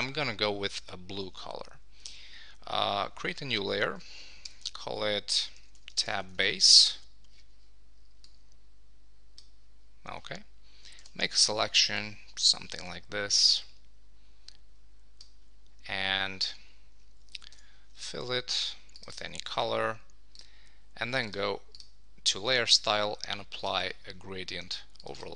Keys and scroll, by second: 4.4 shift+super+n, 6.6 Return, 17.5 super+BackSpace, 17.9 super+d.